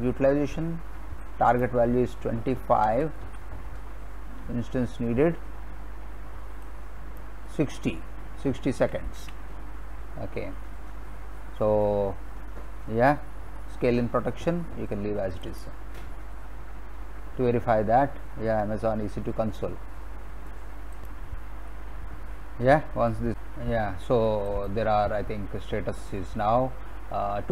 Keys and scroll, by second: 2.9 2, 3.2 5, 8.8 6, 9.2 0.